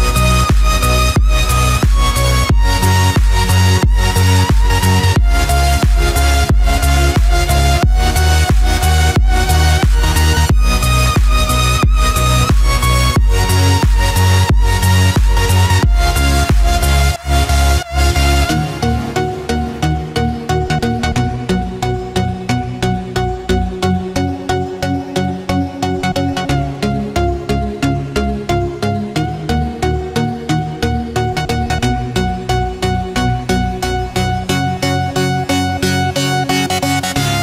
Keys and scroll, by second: 24.7 ctrl+=.